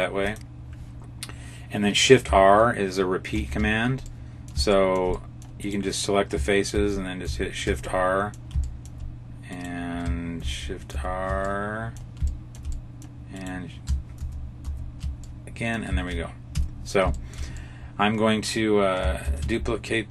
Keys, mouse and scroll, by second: 3.2 shift+r, 3.9 middle click, 4.6 shift+middle click, 5.0 middle click, 5.5 right click, 6.6 shift+r, 7.1 shift+r, 7.8 middle click, 8.6 shift+middle click, 9.4 right click, 10.3 shift+r, 10.9 shift+r, 11.4 middle click, 12.2 shift+middle click, 12.6 middle click, 13.3 right click, 14.1 shift+r, 14.5 shift+r, 15.1 middle click, 16.4 Tab, 16.9 scroll down 4, 17.0 shift+middle click, 17.4 middle click, 19.1 shift+d.